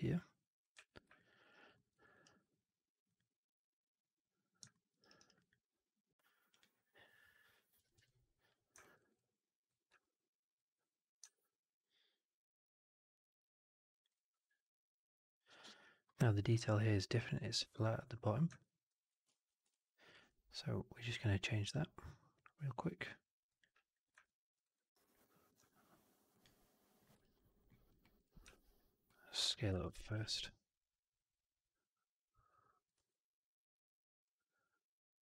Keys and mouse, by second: 0.5 click, 0.6 f, 1.0 alt+click, 1.3 alt+right drag, 1.4 alt+right drag, 1.6 alt+middle drag, 1.8 alt+right drag, 2.0 alt+right drag, 4.6 alt+middle drag, 4.9 alt+right click, 5.0 alt+right click, 5.3 alt+click, 6.5-8.4 drag, 8.7 alt+middle click, 8.9 alt+right click, 9.0 alt+click, 9.7 e, 10.4-13.9 drag, 19.2 ctrl+z, 19.6-20.0 alt+drag, 20.1 1, 21.6 click, 22.2 click, 23.4 click, 24.1 alt+middle click, 24.5 alt+right click, 24.8 alt+right click, 25.1 alt+middle click, 27.1 alt+right click, 27.4 alt+right click, 27.6 alt+middle click, 28.4 4, 29.7 ctrl+z, 29.9 r, 32.6 middle click, 32.8 w.